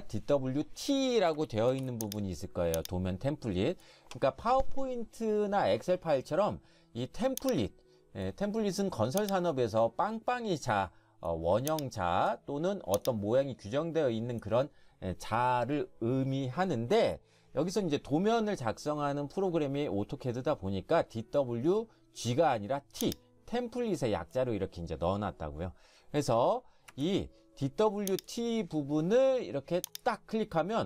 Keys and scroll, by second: 1.7 ctrl+shift+1, 26.9 Escape.